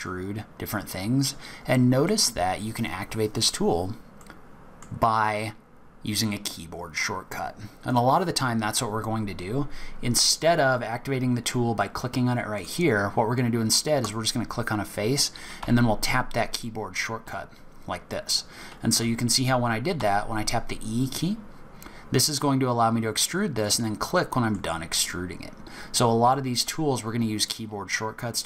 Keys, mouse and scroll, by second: 2.1 middle click, 3.7-4.2 scroll down 2, 4.2 middle click, 7.8 click, 12.5 click, 14.0 click, 15.6 e, 19.9 e, 24.0 middle click, 25.0-25.8 scroll up 3, 25.8-26.3 scroll down 3, 26.3 middle click.